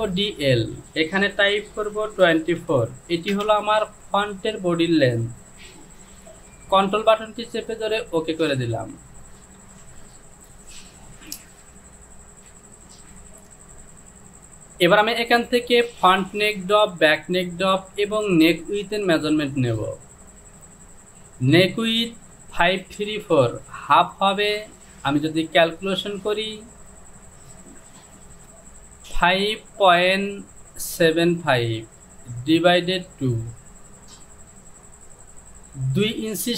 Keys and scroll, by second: 2.7 KP_2, 2.7 KP_4, 3.4 Return, 9.7 Home.